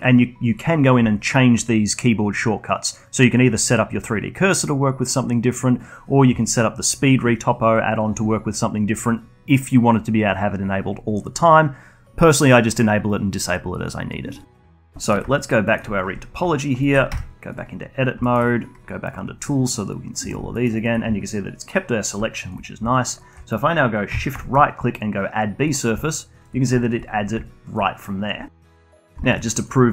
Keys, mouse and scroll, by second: 15.0 middle click, 15.3-15.6 alt+drag, 15.6 alt+middle click, 15.8 alt+click, 16.2-16.5 scroll up 2, 16.5 alt+click, 16.8 alt+middle click, 17.0 Tab, 17.9 scroll up 2, 18.2 alt+middle click, 19.0 click, 20.5 alt+middle click, 20.7-22.6 alt+drag, 22.6 scroll down 2, 22.8-24.3 alt+drag, 24.3-26.1 shift+right drag, 26.1-28.8 alt+drag, 28.9 middle click, 29.3 alt+click, 29.8 scroll up 1.